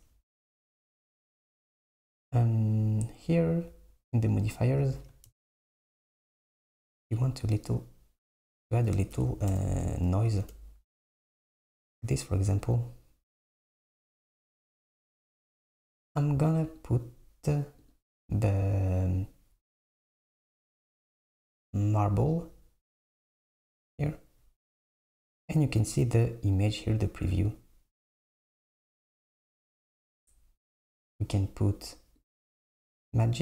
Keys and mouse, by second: 5.0-8.0 drag, 8.5 click, 16.8-21.0 drag, 26.6-29.6 drag, 31.0-33.4 drag.